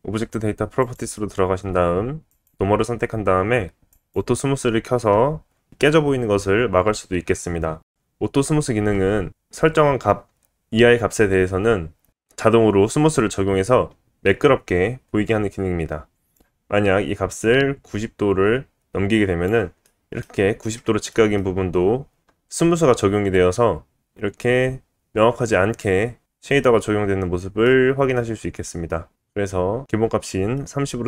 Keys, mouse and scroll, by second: 0.8 click, 2.3-4.1 drag, 16.1-19.6 drag, 19.6-20.2 middle drag, 20.2-20.7 scroll up 2, 20.9 shift+middle click, 22.5-23.5 scroll down 2, 26.8-27.4 scroll up 2, 27.4 middle click, 28.1 middle click, 28.9 scroll up 1, 30.3 shift+middle click.